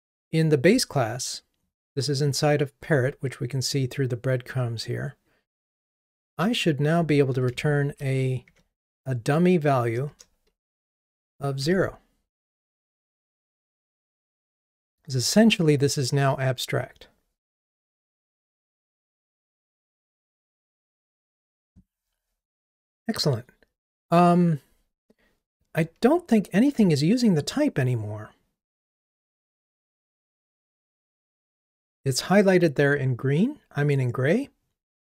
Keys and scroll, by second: 12.6 ctrl+r.